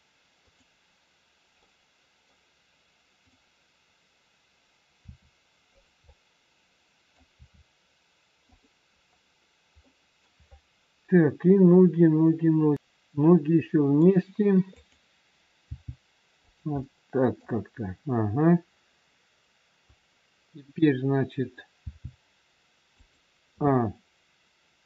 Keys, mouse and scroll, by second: 1.5 middle click, 3.2 click, 5.0 r, 5.9 scroll up 1, 6.0 middle click, 7.3 r, 9.0-9.8 scroll down 1, 9.8 middle click, 14.7 click, 15.7 g, 16.8 middle click, 21.7 g, 23.6 a.